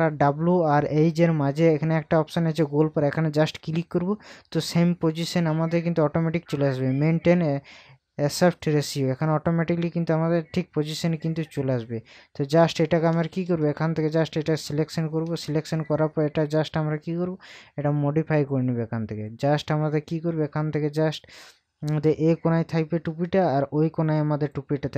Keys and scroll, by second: 13.1 ctrl+KP_Add.